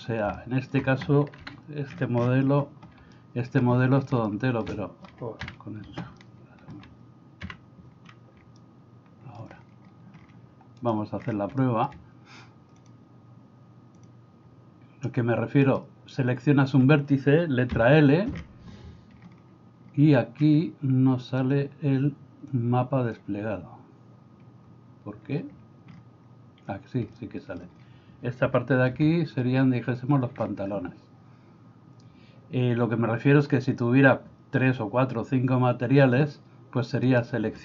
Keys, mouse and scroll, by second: 0.3 middle click, 1.4 KP_1, 3.3 shift+middle click, 4.3 middle click, 5.4 KP_1, 6.2 middle click, 8.7 shift+middle click, 11.7 shift+middle click, 12.9-14.3 drag, 22.6 click, 27.3 shift+middle click, 29.0 a.